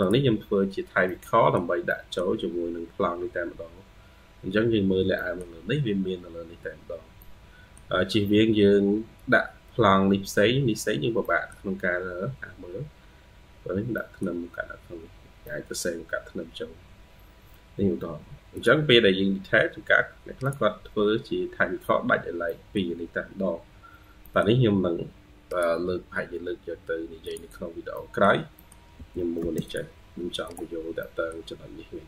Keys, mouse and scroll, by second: 0.7 scroll down 1, 0.9 middle click, 1.7 middle click, 4.2-5.0 scroll up 4, 5.0 middle click, 6.5-7.0 scroll down 1, 7.0 middle click, 8.2-8.6 scroll down 2, 10.7-11.1 scroll down 3, 11.1 middle click, 13.0-13.8 scroll up 5, 13.8 middle click, 15.3 middle click, 17.4 scroll down 1, 20.9-21.6 scroll down 3, 22.3 middle click, 23.4-24.1 scroll up 2, 24.1 middle click, 27.5 scroll down 1, 27.8 middle click, 28.4 middle click, 28.8 typing, 30.9 middle click, 31.9-32.0 scroll down 4.